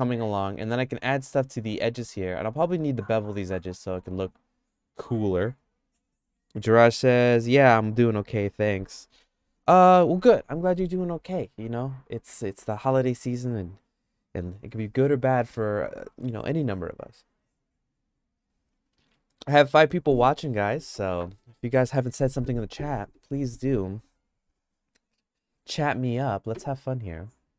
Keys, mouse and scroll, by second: 27.2 click.